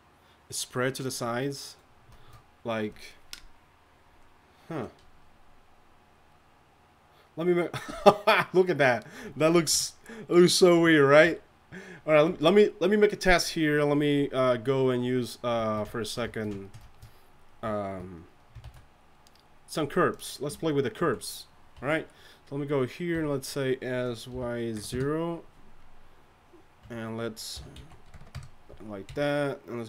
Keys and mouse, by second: 9.7 KP_1, 10.8 KP_3, 18.6 shift+a, 21.0 z, 21.7 Tab, 23.1 s, 26.8 Tab, 27.5 r, 29.1 KP_1, 29.1 KP_2.